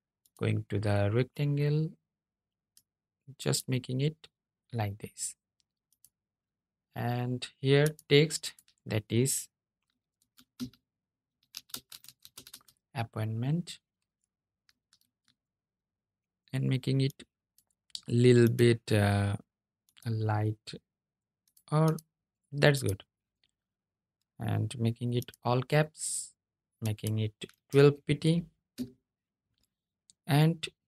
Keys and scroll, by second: 14.1 super+a.